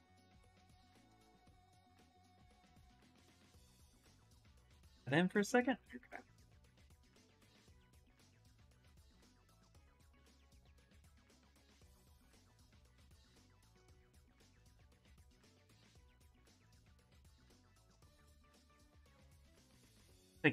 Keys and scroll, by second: 6.8 s, 9.7 s, 11.8 space, 13.9 s, 16.4-17.6 typing, 19.3-20.5 typing.